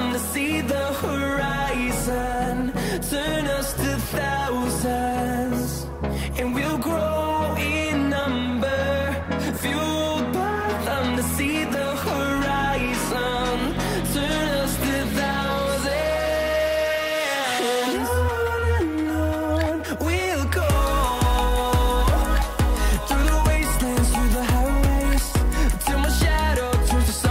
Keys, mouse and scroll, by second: 2.1 click, 3.8 click, 4.3 scroll down 1, 5.2 click, 5.2 click, 7.5-7.8 scroll up 1, 8.0 click, 9.5 scroll up 1, 10.2 click, 11.5-12.4 scroll down 1, 12.4 click, 14.0 scroll up 1, 14.8 click, 15.2-16.8 scroll down 2, 17.6 click, 17.7 click, 18.9-19.3 scroll up 1, 19.9 click, 20.2-20.6 scroll down 1, 22.9-24.4 scroll up 1, 24.4 click, 26.2 click.